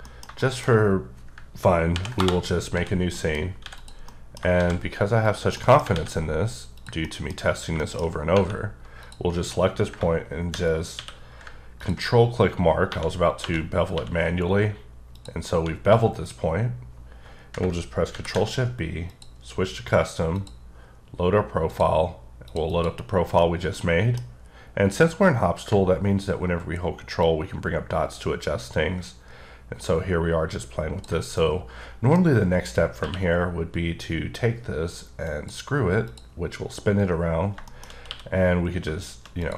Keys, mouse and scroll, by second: 0.1 middle click, 0.5 double middle click, 2.0 ctrl+n, 2.3 Return, 2.8 d, 3.2 middle click, 3.7 x, 3.8 click, 4.1 middle click, 4.6 shift+a, 5.3 click, 5.6 middle click, 6.0 alt+x, 6.8 click, 7.1 middle click, 7.4 scroll up 2, 7.8 shift+middle click, 9.1 click, 9.9 shift+click, 11.0 q, 11.8 ctrl+click, 12.9-14.0 typing, 14.5-14.9 scroll up 4, 15.2 click, 18.2 ctrl+shift+b, 19.1 click, 20.4 click, 21.8 click, 22.5 click, 22.7 double click, 23.4 middle click, 27.3 ctrl+click, 31.4 middle click, 33.1 q, 35.3 click, 36.1 click, 37.7 middle click, 38.1 q, 39.4 click.